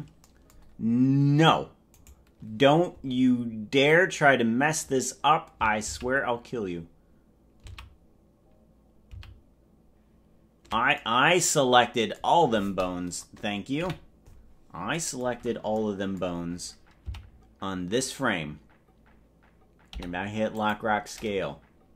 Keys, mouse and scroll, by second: 2.1 right click, 3.3-4.1 scroll up 6, 7.1 ctrl+z, 8.7 ctrl+z, 10.1 ctrl+z, 13.9 KP_Decimal, 17.3 Left, 19.9 i.